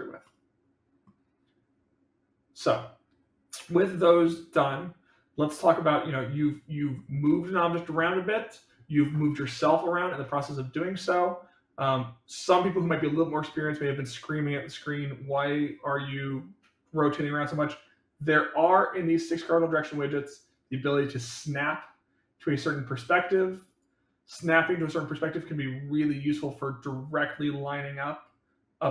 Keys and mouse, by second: 0.1-1.0 middle drag, 5.6-6.8 middle drag, 11.0-12.6 middle drag, 21.1 click, 22.5 click, 24.5 click, 26.2 click, 27.3-28.7 drag.